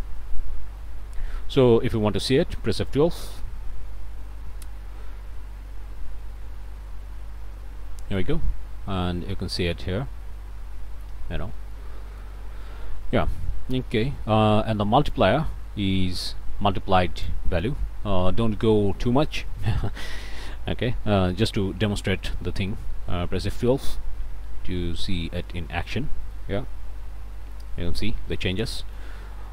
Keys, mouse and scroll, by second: 0.5 middle click, 1.0-1.3 scroll up 2, 2.2 middle click, 3.1 F12, 7.7-8.0 scroll down 2, 8.2 middle click, 8.6-8.9 scroll down 2, 9.0-11.2 middle drag, 11.3 scroll down 1, 11.7 click, 12.5 scroll up 1, 15.1-17.5 drag, 18.0-18.5 scroll down 2, 18.7 click, 19.5 click, 22.2 F12, 26.3-27.7 drag, 28.5 click.